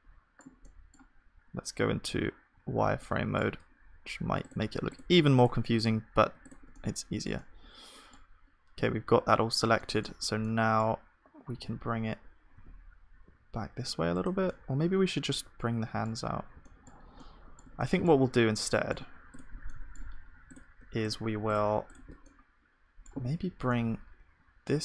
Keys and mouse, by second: 2.0 z, 5.3-8.8 drag, 6.8-8.8 right drag, 8.8 z, 11.5 g, 14.5-24.8 middle drag, 22.3-23.9 drag, 23.5 g.